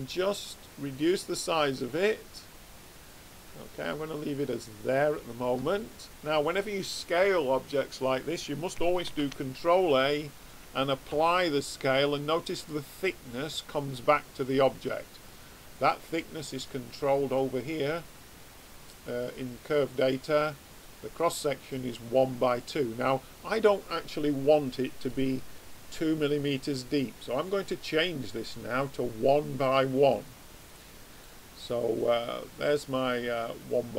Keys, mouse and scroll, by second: 9.0 ctrl+a, 12.7-13.9 middle drag, 16.4-17.9 middle drag, 23.7 middle click, 27.6 click, 31.2 middle click, 31.6 middle click, 32.9 middle click.